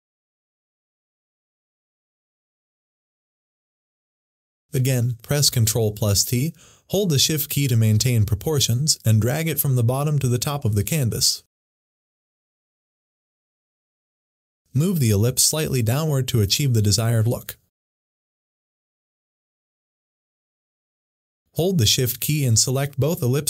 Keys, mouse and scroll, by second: 4.4 ctrl+t, 6.1 Down, 10.5 shift+Down, 11.0-12.8 shift+drag, 14.5 Down, 18.9 click.